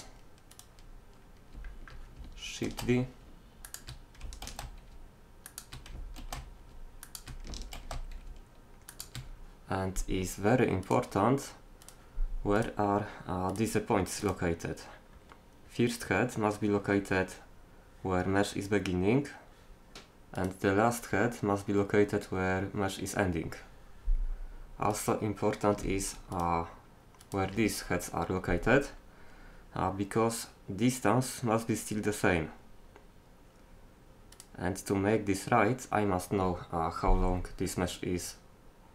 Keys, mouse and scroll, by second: 0.5 middle click, 0.9 middle click, 1.2 middle click, 2.6 shift+d, 4.5 shift+d, 6.2 shift+d, 15.2-16.2 drag, 20.4-22.3 drag, 24.9-28.8 drag, 28.8 right click, 32.9-34.4 middle drag, 34.4 right click, 34.8 middle click.